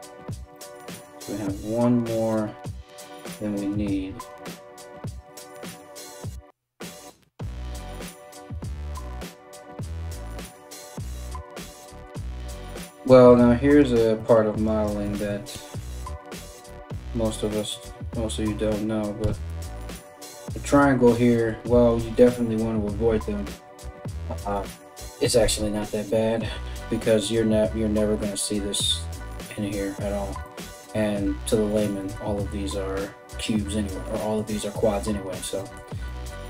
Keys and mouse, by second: 2.9 alt+right click, 3.3 alt+right click, 7.6 ctrl+r, 13.4 right click, 14.2 right click, 15.1 f, 16.0 right click, 16.3 f, 18.8 f, 19.1 f, 21.3 alt+x, 26.4-36.4 middle drag.